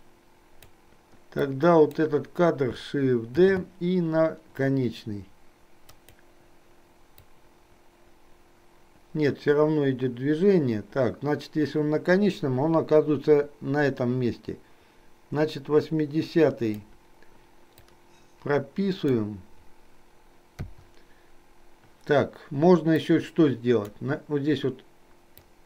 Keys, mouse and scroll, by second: 1.5 click, 3.5 shift+d, 7.3-16.9 drag, 17.9-19.3 drag, 23.0 click, 25.5 click.